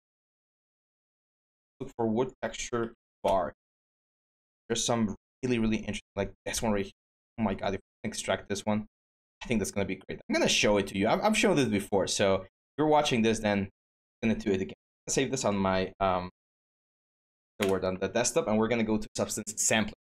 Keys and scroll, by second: 0.5 typing, 2.9 Return, 3.4 typing, 15.8-17.0 typing, 17.3 Return.